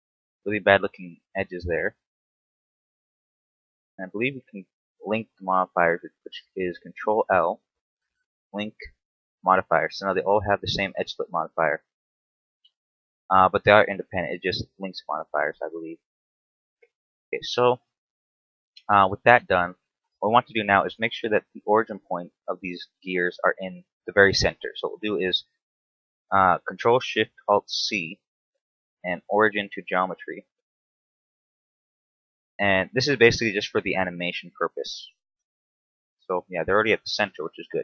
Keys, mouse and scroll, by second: 1.2 right click, 2.0 click, 3.5 shift+right click, 4.2 shift+right click, 6.8 ctrl+l, 11.2 right click, 12.4 right click, 13.1 right click, 17.0-17.4 scroll down 2, 17.4 shift+middle click, 17.8-18.6 scroll up 4, 22.7 t, 23.5-23.9 scroll down 1, 23.9 shift+middle click, 27.8 ctrl+alt+shift+c, 30.3 right click, 31.4 ctrl+alt+shift+c, 33.3 right click, 34.4 ctrl+alt+shift+c, 36.3 scroll down 1, 36.8 shift+middle click, 37.5 scroll up 1.